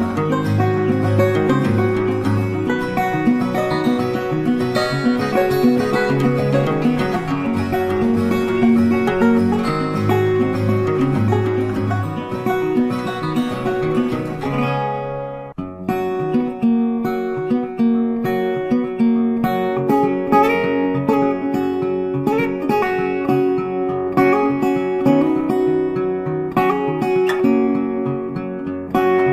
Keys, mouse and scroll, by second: 0.2 ctrl+space, 1.3 double click, 2.7 ctrl+g, 4.0 ctrl+space, 4.1 ctrl+click, 4.5 space, 5.2 ctrl+click, 8.8 shift+click, 10.5 shift+click, 11.0 shift+click, 12.6 ctrl+space, 12.7 ctrl+click, 12.8 ctrl+space, 14.0 space, 14.7 alt+click, 15.8 shift+click, 18.8 double click, 21.2 ctrl+space, 25.7 ctrl+space, 25.7 ctrl+click.